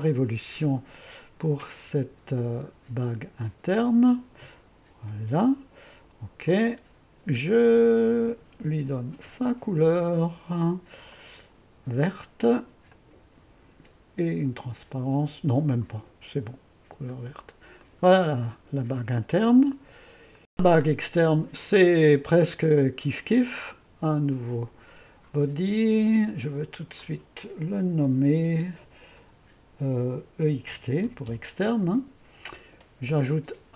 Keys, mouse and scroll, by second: 3.4 click, 5.0 2, 6.5-8.3 drag, 9.2 ctrl+d, 11.2-18.5 drag, 19.7 click, 21.0 click, 23.7-26.8 drag, 27.3 click, 28.2 F2, 30.2-31.5 typing.